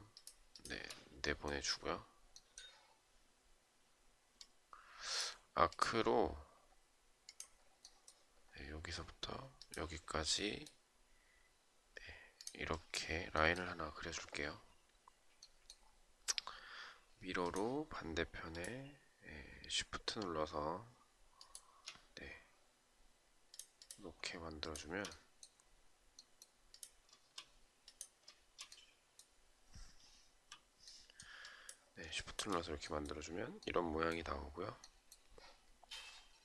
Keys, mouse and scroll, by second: 0.2 shift+click, 0.3 shift+double click, 20.9 shift+click, 24.2 shift+click, 31.8 shift+click.